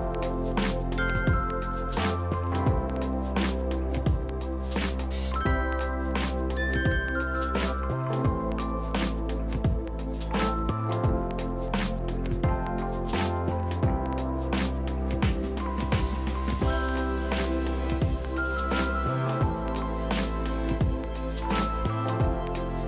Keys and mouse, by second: 1.1 shift+x, 1.2 Escape, 1.3 click, 2.3 Escape, 2.5 click, 5.1 Escape, 5.3 click, 8.6 Escape, 8.8 click, 9.6 Escape, 9.8 click, 9.9 Escape, 10.2 click, 10.4 Escape, 10.6 click, 14.5 ctrl+q, 14.7 click, 16.0 click, 19.1 ctrl+e, 19.3 click, 20.6 click.